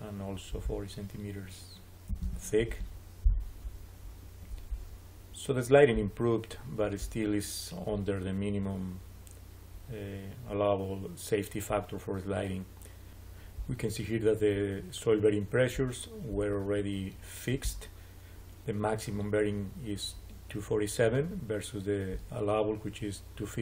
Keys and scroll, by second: 1.8-2.6 typing.